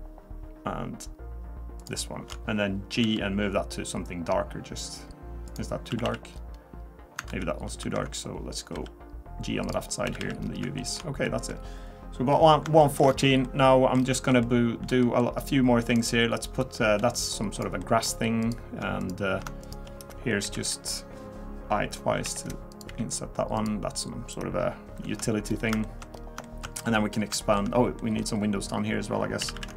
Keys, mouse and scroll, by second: 2.3 alt+shift+click, 3.0 g, 5.9 a, 6.0 a, 6.3-7.1 scroll down 2, 7.3 ctrl+z, 7.8 ctrl+z, 8.7 g, 10.1 a, 10.2 a, 10.4 scroll down 2, 10.8 shift+middle click, 11.3 middle click, 11.5 scroll up 2, 12.7 scroll up 2, 12.8 shift+middle click, 13.1-13.9 scroll down 4, 13.4 middle click, 14.0-14.3 scroll up 2, 14.4 shift+middle click, 15.0 middle click, 15.3-15.6 scroll up 2, 16.0 click, 17.0 g, 17.8 middle click, 18.4 click, 19.0 shift+click, 19.6 click, 20.4 i, 22.9 e, 25.5-25.8 scroll down 3, 25.8 shift+middle click, 26.1-26.4 scroll up 3, 26.4 shift+middle click, 26.7 middle click, 27.4 shift+middle click, 28.0 middle click, 29.4 a, 29.5 a.